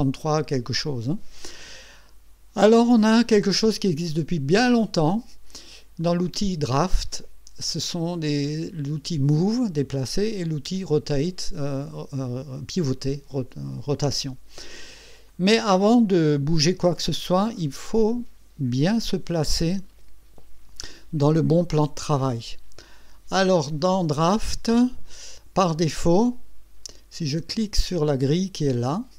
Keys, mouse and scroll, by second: 4.6 click, 6.0 click, 6.3 click, 15.3 click, 15.8-16.6 right drag, 25.7-27.2 drag.